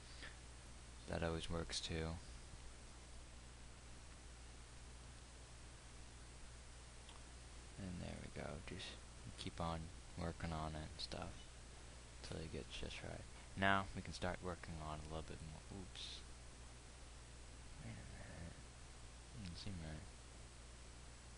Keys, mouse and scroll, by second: 5.4 g, 9.8-21.3 drag.